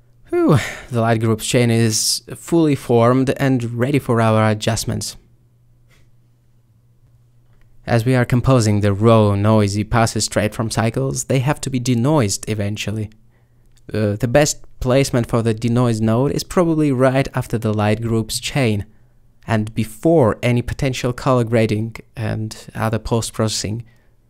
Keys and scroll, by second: 15.1 a.